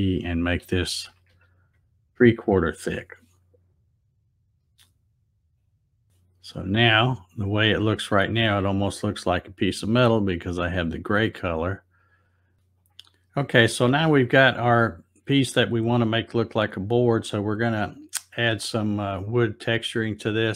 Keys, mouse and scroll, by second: 5.5 click, 5.9 click, 12.1 click, 12.8 click.